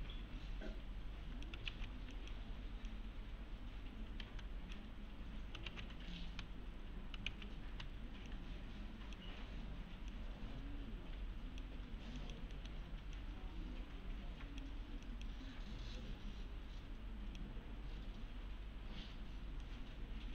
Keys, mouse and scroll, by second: 1.7 ctrl+z, 2.1 click, 4.2 s, 5.7 ctrl+z, 6.3 s, 7.3 ctrl+z, 7.7 s, 8.3-9.2 click, 12.5 middle click, 13.2-14.7 click, 17.8-19.6 scroll down 1, 19.6-20.3 middle click.